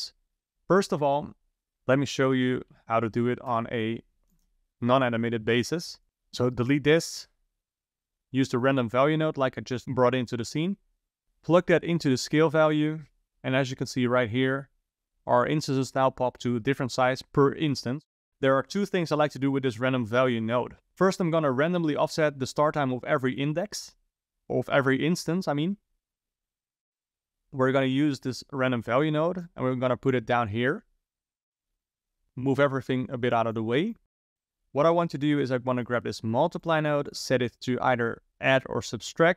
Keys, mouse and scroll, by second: 1.6 shift+a, 6.0 click, 6.5 ctrl+right click, 7.4 click, 7.9 click, 11.2 click, 11.7 click, 26.3-26.9 ctrl+right drag, 26.9-27.4 middle drag, 27.4-28.4 scroll down 1, 28.4 click, 29.4 click, 30.3-32.8 middle drag, 32.8 click, 33.6 click, 34.3 click, 35.8 click, 36.3 shift+d, 37.1-39.3 drag.